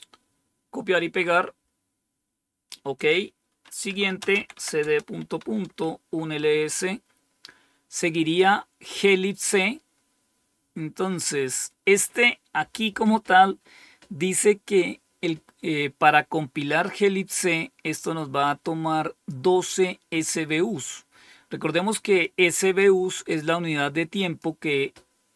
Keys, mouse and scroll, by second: 2.8 click, 3.6-5.6 typing, 8.1 click, 17.9-19.2 drag, 22.1 click, 23.2-24.3 drag.